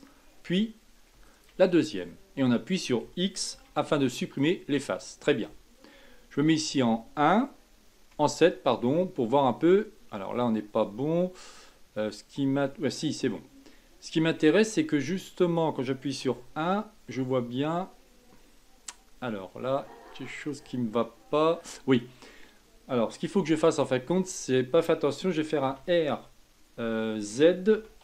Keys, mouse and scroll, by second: 1.3 shift+click, 1.8-3.5 middle drag, 3.5 x, 4.8-6.8 middle drag, 6.8 KP_1, 8.1 KP_7, 9.0-12.0 middle drag, 13.3-14.7 middle drag, 14.7-15.1 scroll down 3, 15.1-16.2 middle drag, 16.2 KP_1, 17.0-20.1 middle drag, 22.2-23.5 scroll up 2, 23.5 Tab, 25.6 r.